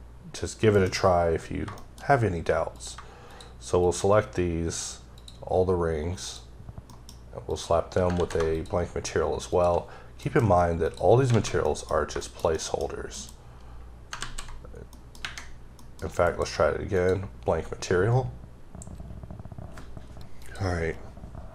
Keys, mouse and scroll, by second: 0.8 m, 1.9 middle click, 2.8 click, 3.9 shift+double click, 5.2 shift+click, 6.3 shift+click, 6.9 shift+middle click, 7.5 shift+click, 8.2 z, 8.6 shift+click, 10.3 alt+m, 10.9 click, 11.3 scroll down 1, 11.4 alt+a, 11.7 middle click, 12.2 double middle click, 12.4 scroll down 1, 12.6 middle click, 13.2 m, 14.9 middle click, 15.2 ⊘, 15.8 middle click, 16.3 m, 17.0 click.